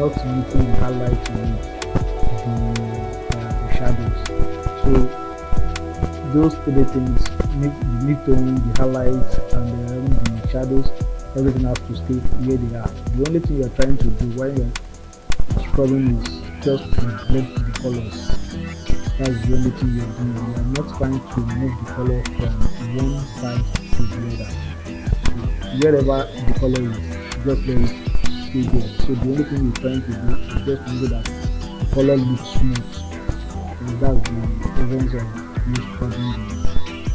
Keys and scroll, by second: 1.9 ctrl+z.